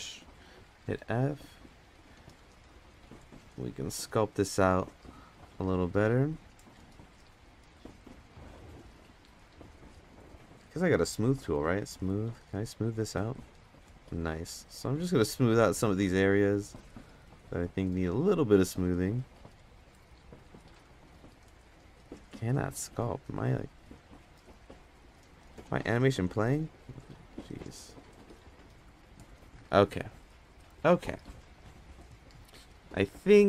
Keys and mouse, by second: 0.5 f, 1.8-3.6 drag, 5.6 click, 7.2 ctrl+z, 9.3 f, 11.6 click, 12.6 f, 13.3-14.4 drag, 15.0-15.7 drag, 15.8 ctrl+z, 16.9 click, 19.0-19.9 drag, 19.0 space, 20.4-21.8 drag, 24.3-25.9 drag, 26.2 click, 27.7 click, 27.9-28.6 drag.